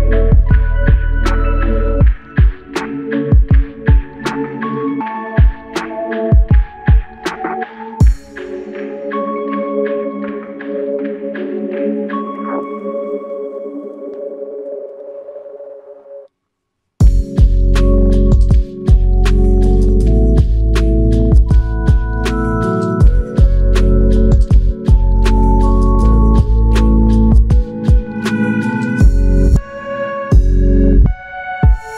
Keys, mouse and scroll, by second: 22.1-24.3 typing, 29.6 double click.